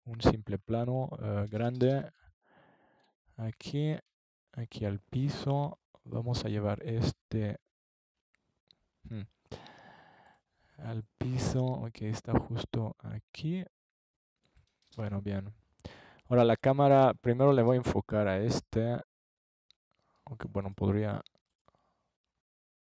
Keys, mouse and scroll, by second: 2.9-4.8 drag, 5.6 Escape, 9.7-10.9 middle drag, 11.9 ctrl+alt+KP_0, 15.7 KP_0, 16.6 KP_0, 17.5 KP_0.